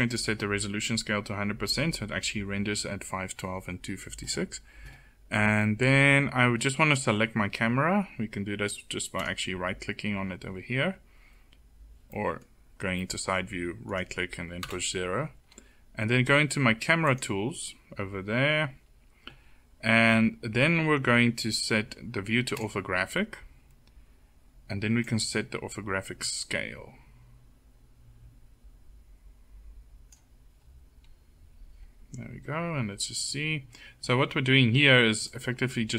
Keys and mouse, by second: 8.7-11.6 drag, 14.1 KP_0, 16.6 middle click, 23.7 middle click, 25.3-26.4 drag, 34.8-35.9 drag.